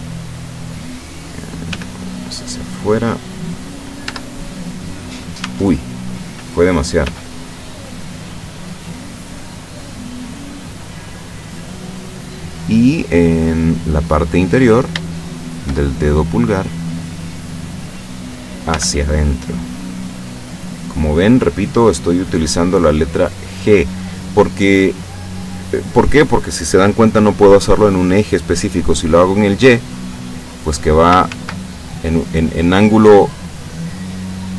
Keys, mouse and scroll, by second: 1.7 g, 3.5 click, 4.1 Tab, 5.5 Tab, 7.1 g, 10.1 click, 12.6-13.6 middle drag, 14.6 right click, 15.1 shift+right click, 15.5 shift+right click, 16.0-17.8 shift+middle drag, 18.8 g, 23.4 click, 29.8-31.1 drag, 31.4 ctrl+z.